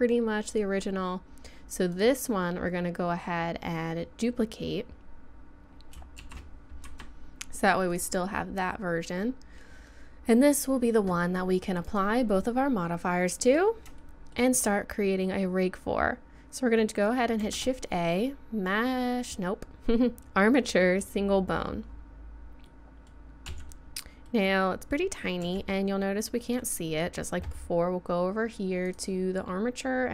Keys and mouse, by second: 1.2-6.3 drag, 6.3 shift+d, 7.9-9.4 drag, 11.9-15.1 drag, 15.1 middle click, 17.4 shift+a, 23.5 z, 25.4 z, 26.0-26.4 middle drag.